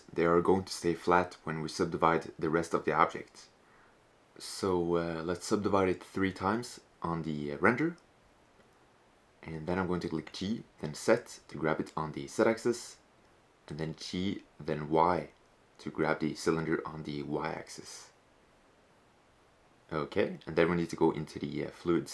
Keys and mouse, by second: 3.0-4.3 drag, 4.3-5.3 middle drag, 5.4 middle click, 7.0 middle drag, 7.8-9.4 drag, 9.4 middle click, 9.5 right click, 9.6 g, 11.9 click, 14.8 g.